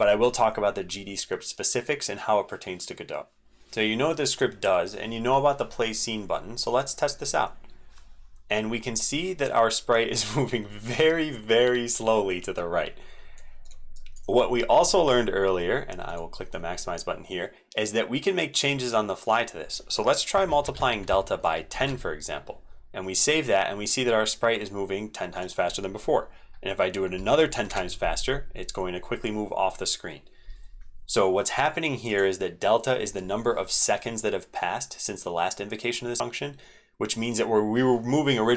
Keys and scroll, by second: 3.3 alt+Left, 3.3 ctrl+x, 3.3 super+2, 3.5 super+v, 3.6 super+2, 13.9 super+Left, 21.7 ctrl+s, 27.6 ctrl+s.